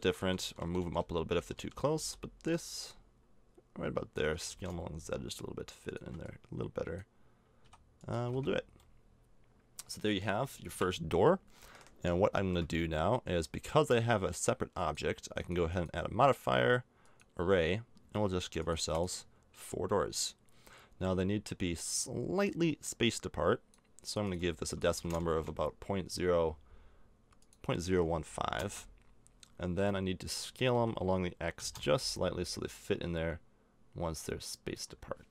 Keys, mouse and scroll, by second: 0.0-1.9 typing, 2.6-4.8 drag, 4.3 s, 6.2-8.1 drag, 7.6 s, 8.1 a, 8.2 Tab, 8.5 middle click, 10.7 KP_0, 11.9 middle click, 14.7-17.5 drag, 18.6-20.9 drag, 22.4-26.9 drag, 25.3 KP_Enter, 29.8-31.9 middle drag, 30.7 s.